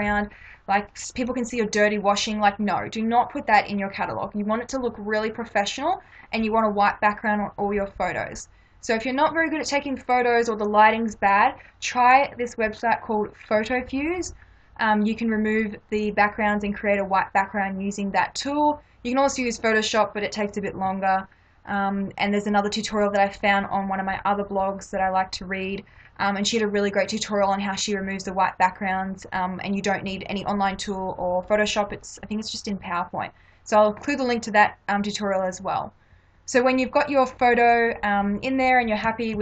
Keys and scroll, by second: 39.1 Left.